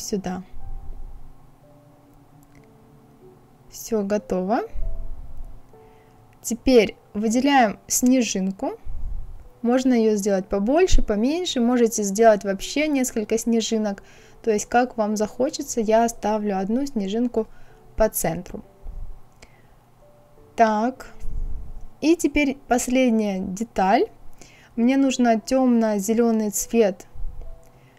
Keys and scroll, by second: 14.0 Up, 15.2 Left, 15.6 Right, 16.0 Left.